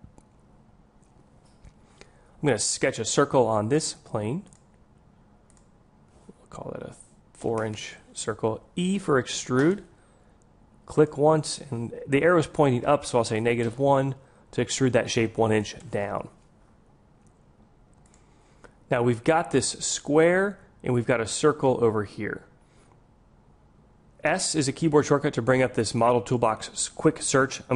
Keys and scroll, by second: 9.7 e, 24.9 s.